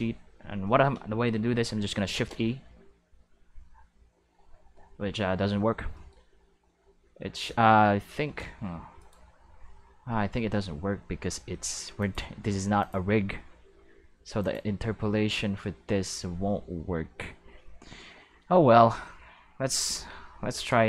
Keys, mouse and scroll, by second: 2.0 shift+e, 6.2-8.5 middle drag, 8.5 g, 8.9 right click, 11.9 click, 12.8 click, 14.4 click, 19.9 shift+w, 20.5 shift+e.